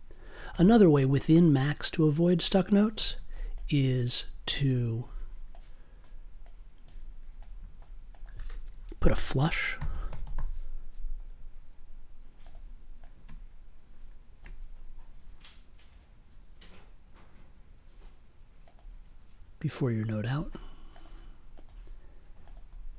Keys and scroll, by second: 2.9 super+y, 9.0 n, 9.7 f, 10.0 u.